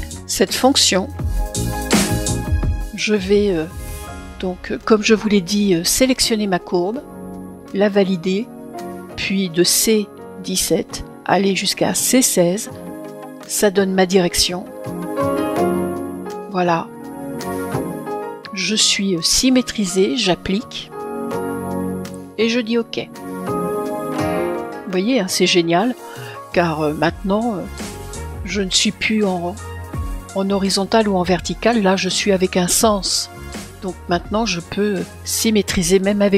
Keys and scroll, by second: 7.2 Return.